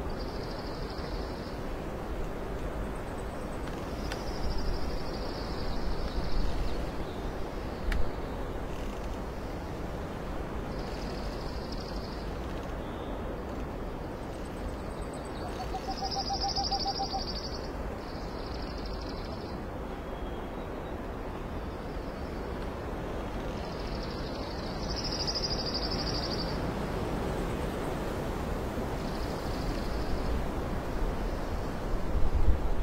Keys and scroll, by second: 10.9 alt+space, 13.3 space, 14.2 space, 14.8 ctrl+z, 15.4-17.6 typing, 19.6 space, 22.7 space, 25.4 space, 27.9 alt+space, 28.4 alt+space, 31.8 space, 32.2 ctrl+t.